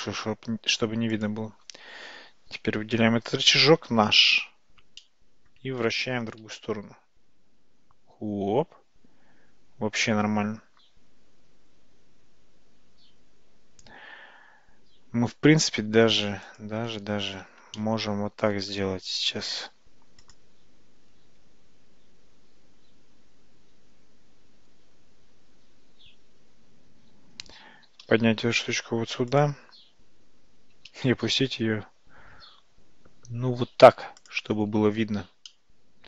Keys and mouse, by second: 5.0 shift+middle click, 6.5 r, 17.8-18.8 shift+middle drag, 27.9 g, 30.8 g, 35.5-36.0 middle drag.